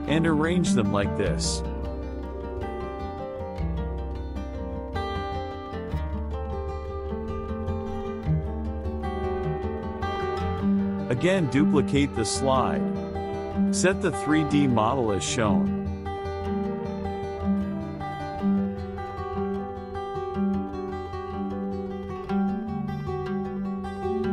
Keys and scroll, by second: 10.9 ctrl+d.